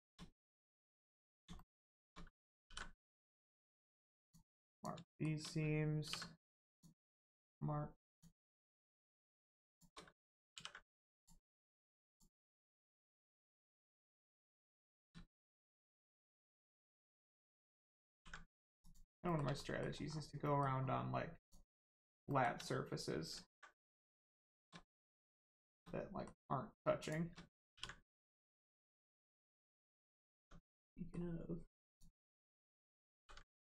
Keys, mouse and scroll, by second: 0.5 middle click, 0.6 middle click, 1.6 shift+middle click, 2.3 ctrl+middle click, 4.2 click, 5.1 shift+middle click, 5.6 ctrl+middle click, 6.7 click, 7.1 middle click, 8.1 click, 8.9 shift+click, 9.7 shift+click, 10.1 ctrl+click, 10.6 ctrl+e, 11.2 click, 11.5 middle click, 12.1 click, 12.6 middle click, 14.8 shift+middle click, 15.4 middle click, 15.4 middle click, 17.2 click, 18.2 ctrl+e, 18.8 click, 19.3 shift+middle click, 19.5 middle click, 20.1 scroll up 1, 20.4 middle click, 21.4 click, 21.8 middle click, 22.3 shift+middle click, 23.3 ctrl+middle click, 24.5 shift+click, 24.8 middle click, 25.5 shift+middle click, 25.8 middle click, 25.9 middle click, 27.0 shift+click, 27.7 ctrl+e, 28.2 click, 28.5 shift+middle click, 28.8-29.6 scroll up 1, 29.6 Tab, 30.1 scroll up 1, 30.3 Tab, 30.9 middle click, 31.9 click, 33.2 ctrl+e.